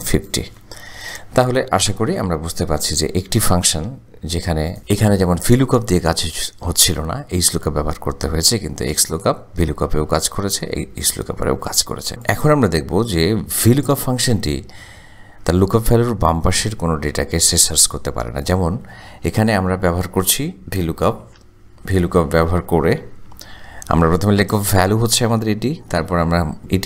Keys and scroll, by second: 2.4 Delete, 12.1 ctrl+z, 19.8 =, 21.5 v, 21.7 o, 23.3 Tab, 26.1 ,, 26.6 BackSpace.